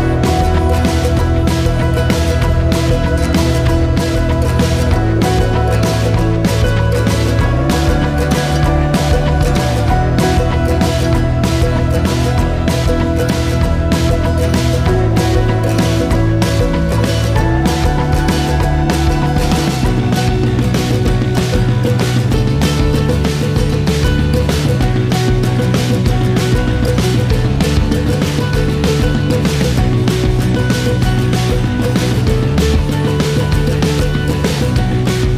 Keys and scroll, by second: 17.9 ctrl+l, 32.3-33.0 typing, 33.4 Return.